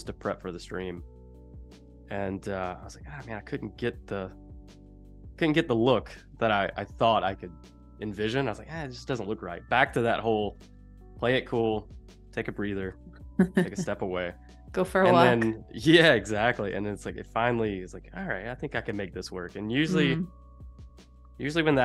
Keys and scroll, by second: 4.4 a, 6.4 super+c, 9.9 super+c, 11.6 Escape, 12.9 v, 16.5 super+f, 18.5 Left, 19.2 Left, 19.7 Down.